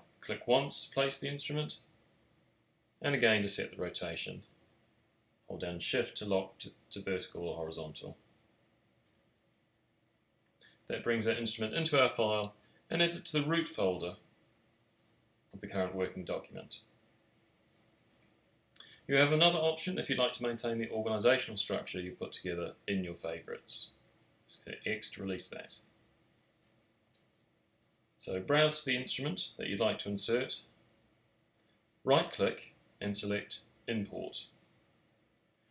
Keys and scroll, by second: 23.0 x.